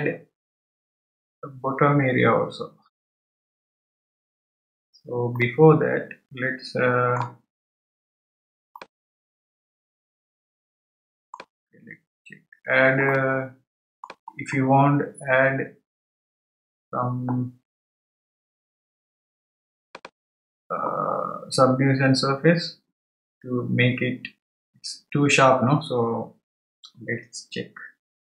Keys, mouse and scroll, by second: 5.4-7.8 middle drag, 7.8-8.8 scroll up 3, 8.8-11.8 middle drag, 12.4-13.1 scroll up 1, 13.1-14.4 middle drag, 14.4-15.3 scroll down 1, 15.3-17.4 scroll down 1, 19.9 click.